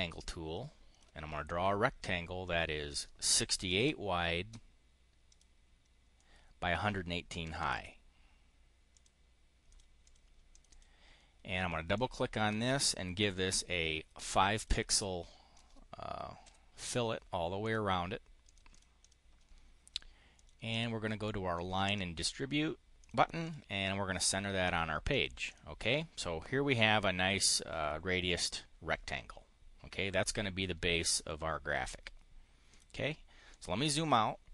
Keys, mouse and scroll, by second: 2.3 click, 3.2-4.1 typing, 5.1 click, 6.0 click, 7.3 1, 7.6 8, 8.8 click, 9.6 click, 9.9 click, 10.4 click, 11.8 click, 13.0 5, 14.4 click, 14.8 click, 16.3 5, 17.5 click, 18.3 click, 18.6 click, 18.8 click, 20.2 click, 21.4 click, 22.8 click, 23.2 click, 25.0 click, 25.2 click, 32.5 click, 33.3 click, 33.8 click, 34.4 middle click.